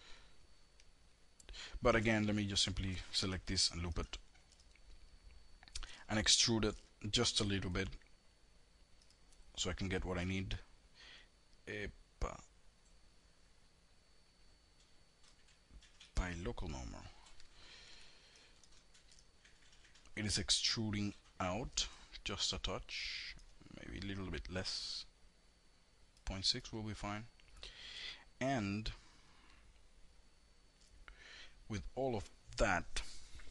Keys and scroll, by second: 2.6 alt+l.